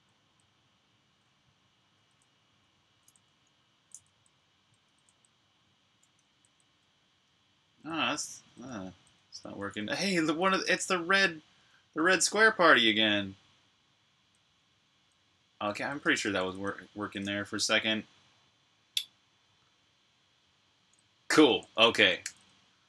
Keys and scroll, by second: 0.0-2.0 typing, 3.4 typing, 5.7-10.4 typing, 11.8 typing, 13.9-15.8 typing, 15.8 super+q, 22.0 super+j.